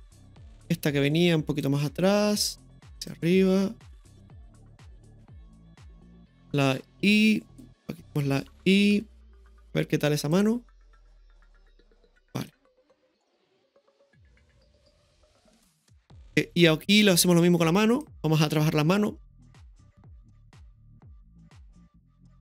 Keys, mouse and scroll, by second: 0.5 right click, 1.6 click, 3.1 click, 5.6 click, 7.1 click, 7.1 i, 8.0 right click, 8.1 i, 8.9 right click, 8.9 i, 10.3 click, 10.4 i, 10.6 space, 12.4 click, 12.5 i, 12.6 space, 16.3-18.0 drag, 19.3-20.1 middle drag, 21.1-22.4 drag.